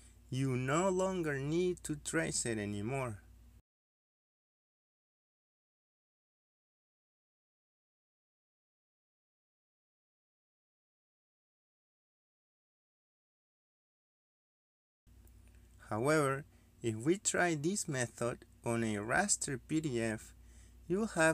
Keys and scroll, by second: 0.7 Delete, 2.6 Escape, 12.8 Escape.